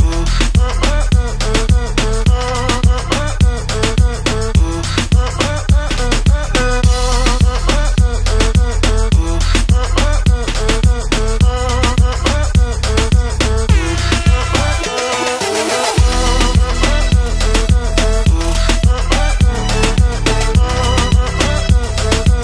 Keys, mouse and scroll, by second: 4.8 click, 9.8 click, 13.9 click, 17.4 click, 19.1 click, 21.1 right click.